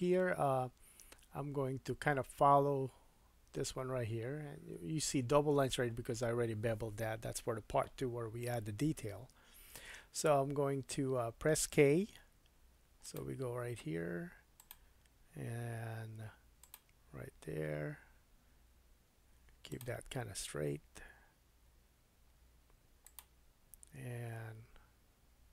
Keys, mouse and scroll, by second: 12.1 k.